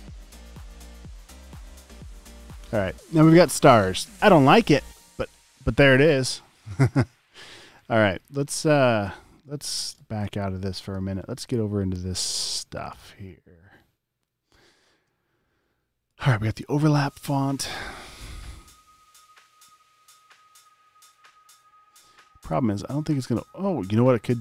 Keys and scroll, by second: 7.8 space, 8.3 alt+super+space, 9.9 space, 14.7 space, 17.8 space, 18.3 space, 24.2 space.